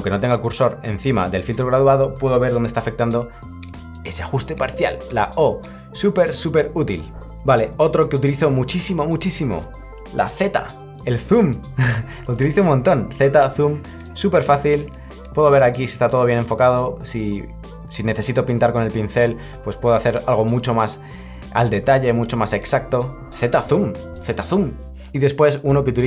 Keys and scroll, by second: 10.8 z, 12.2 z, 16.5 z, 22.8 z.